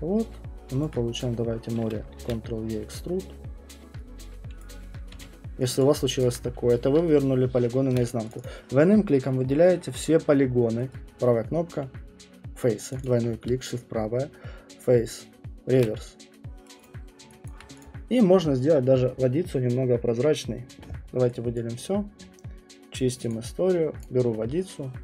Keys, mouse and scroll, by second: 0.8 middle click, 0.8 alt+click, 1.2 middle click, 1.2 click, 1.9 middle click, 2.1 ctrl+e, 4.6 click, 5.1 q, 5.7 click, 5.8 click, 5.9 alt+click, 6.3 alt+click, 6.6 alt+click, 7.9 shift+right click, 8.3 click, 8.4 click, 12.6 right click, 12.9 click, 13.0 click, 16.6 shift+right click, 16.8 click, 17.5 alt+click, 17.5 alt+click, 17.8 click, 20.9-21.5 scroll, 21.5 click, 23.3 middle click, 23.3 click, 24.0 click.